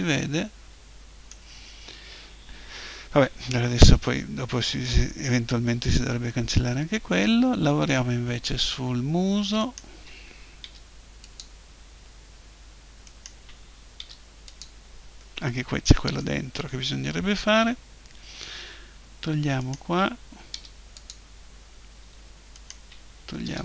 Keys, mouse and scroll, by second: 4.7-6.9 middle drag, 9.6-11.4 right drag, 10.6 Delete, 13.1-14.7 right drag, 14.0 Delete, 15.2 middle click, 19.6-21.3 right drag, 20.5 Delete, 22.5-23.6 drag, 23.5 Delete.